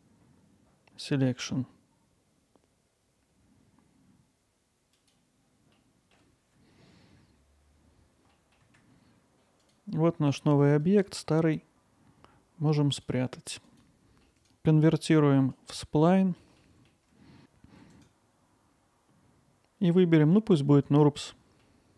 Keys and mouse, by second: 5.7 alt+middle click, 8.3 middle click, 9.7-10.9 drag, 12.9 click, 14.2 middle click, 16.1 alt+middle click, 16.6 middle drag, 18.0-21.0 right drag, 21.6-21.9 alt+middle drag.